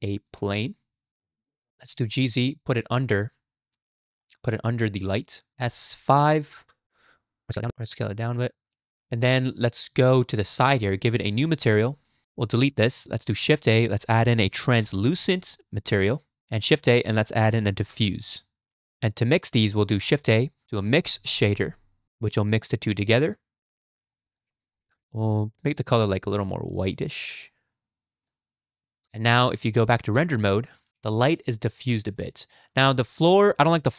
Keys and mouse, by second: 1.9 g, 3.5 z, 4.2 shift+middle drag, 4.7-5.1 middle drag, 5.4 middle click, 5.5 s, 7.0 s, 10.1 click, 11.4 click, 11.8 click, 12.6 x, 13.6 shift+a, 16.8 shift+a, 20.2 shift+a, 22.5 click, 23.1 click, 23.9 drag, 24.3 click, 24.5 click, 24.9-26.3 drag, 29.8 z, 30.9 KP_0, 31.5 shift+middle drag, 32.2 shift+middle click, 32.8 click, 33.3 drag.